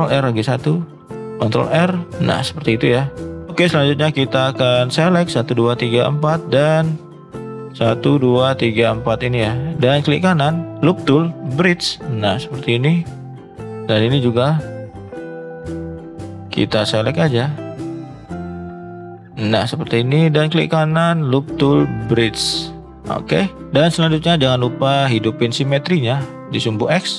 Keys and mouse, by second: 4.4 click, 5.0 shift+click, 5.5 shift+click, 6.0 shift+click, 8.5 shift+click, 9.7 ctrl+z, 9.7 f, 9.9-11.4 right drag, 20.4-22.0 right drag, 23.1-26.3 drag, 26.8 shift+middle drag.